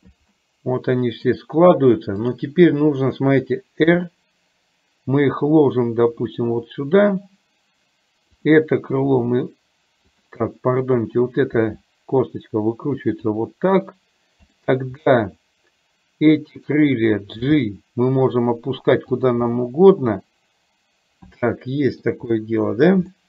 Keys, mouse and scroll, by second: 0.4-1.4 middle drag, 4.0 r, 9.2 r, 11.0 click, 11.7 r, 15.1-16.7 middle drag, 17.6 g, 19.5-22.1 middle drag, 23.1 shift+middle click.